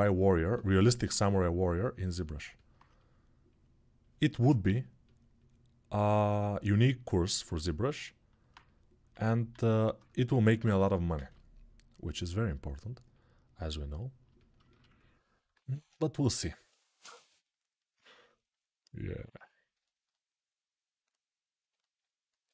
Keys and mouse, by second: 0.0-1.1 ctrl+middle drag, 1.1-14.4 drag, 9.4 alt+q, 10.9 a, 14.4-19.5 ctrl+alt+shift+right drag, 15.4 alt+q, 19.5-22.5 alt+shift+drag.